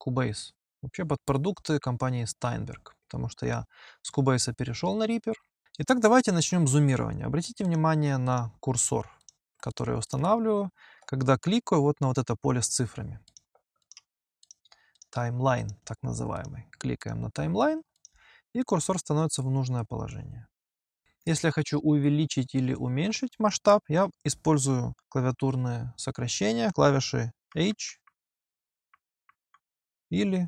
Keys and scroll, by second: 27.3 h.